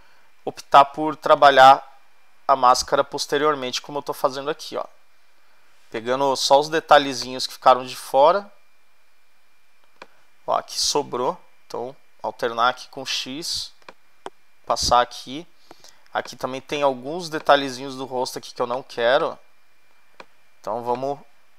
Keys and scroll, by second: 11.9 x, 13.0 ], 16.0 space.